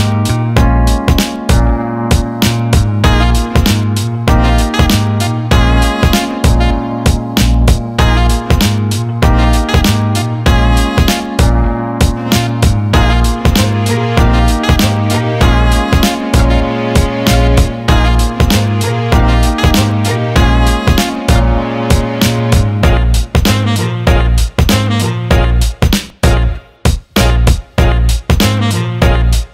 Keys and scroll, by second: 6.6 Escape, 16.2 Escape, 22.6 ctrl+z.